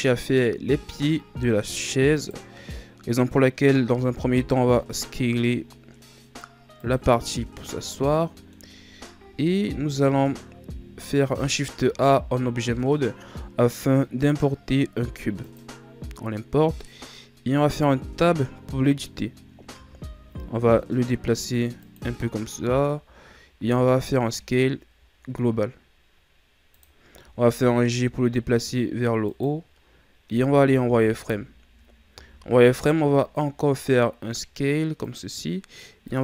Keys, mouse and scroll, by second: 2.1 right click, 3.9 s, 7.3-9.2 middle drag, 9.2 KP_1, 11.8 shift+a, 16.4-17.7 scroll down 1, 17.7 Tab, 19.7 g, 22.3-23.4 shift+scroll down 6, 23.6 s, 27.1 g, 30.5 z, 31.1-32.1 ctrl+scroll up 1, 32.1 s, 36.0-36.2 drag.